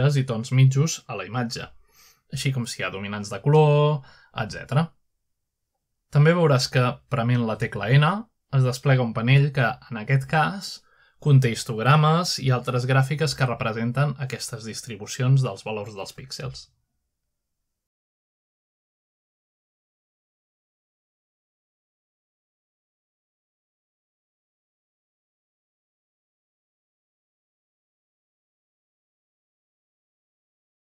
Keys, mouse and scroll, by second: 0.3-3.5 right drag, 4.0-5.3 right drag, 6.3-7.7 right drag, 9.5 n, 13.1 click, 13.9 click, 15.1 click, 16.1-16.7 scroll down 1, 17.3-18.2 scroll up 1, 18.2-19.9 drag, 20.3-20.7 drag, 21.1 click, 21.6-23.2 drag, 23.5 click, 24.7 click, 25.3-26.4 drag, 27.0-29.2 drag.